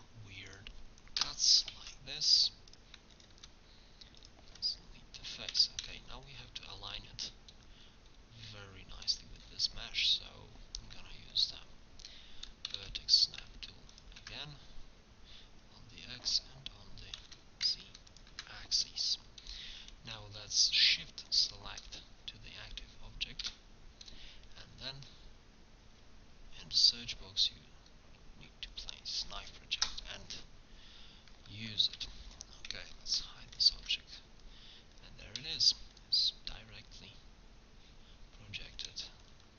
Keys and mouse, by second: 1.8 ctrl+Tab, 3.4 x, 5.5 Tab, 12.7 g, 13.3-14.7 drag, 17.2 g, 21.3-23.1 drag, 23.4 Tab, 24.8 space, 32.0 Tab, 33.2 h, 33.8 Tab, 37.3 a, 38.2 middle click, 38.5 middle click.